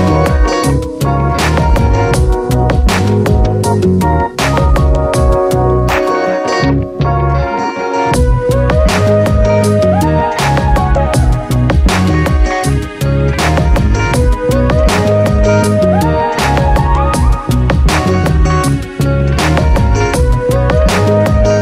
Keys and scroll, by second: 19.3 ctrl+z.